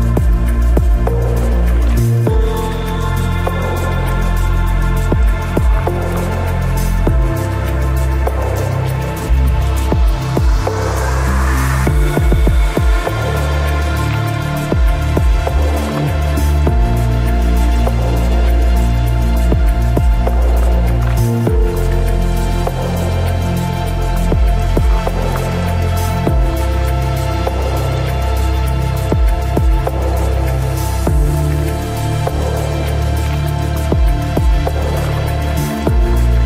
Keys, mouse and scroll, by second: 0.6 g, 2.0-5.2 right drag, 2.0 g, 3.4 g, 4.9 ctrl+r, 6.4 right click, 6.9 ctrl+r, 9.2-10.9 drag, 10.4 g, 11.4-14.4 drag, 11.5 g, 12.8 g, 14.2 ctrl+r, 15.9 g, 17.7 g, 20.4 ctrl+r, 21.5 click, 21.7 ctrl+r, 23.4-25.2 drag, 24.1 g, 25.3 click, 25.3-28.1 right drag, 25.4 g, 26.3 g, 27.0 ctrl+r, 28.4-29.5 right drag, 28.8 g, 30.1 g, 31.6-33.1 right drag, 31.6 g, 33.1-34.4 middle drag, 34.4-35.5 drag, 35.2 g.